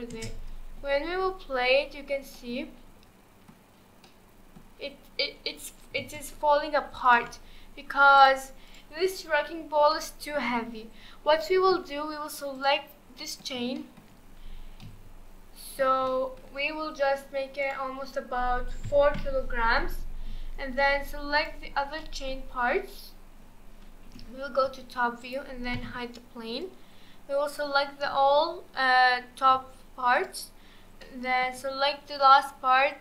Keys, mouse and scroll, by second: 0.1 space, 2.3-3.6 middle drag, 3.6 scroll down 1, 4.0-6.0 middle drag, 6.0 space, 7.0-7.5 drag, 7.5-8.2 scroll up 2, 8.2 click, 8.7 click, 9.9-10.7 middle drag, 10.7-11.4 scroll up 1, 11.4-12.5 shift+middle drag, 12.5 click, 13.2-14.1 middle drag, 14.1-14.6 shift+scroll up 5, 14.6 scroll down 1, 14.8-17.6 middle drag, 17.6-19.7 drag, 19.7-20.5 scroll down 2, 20.5-21.4 scroll down 1, 21.4 click, 22.0-22.4 middle drag, 22.4-24.1 scroll down 1, 24.1 KP_7, 25.2 click, 25.8 h, 26.6 click, 28.9-30.1 scroll up 1, 30.1 shift+click, 31.0-33.0 shift+middle drag.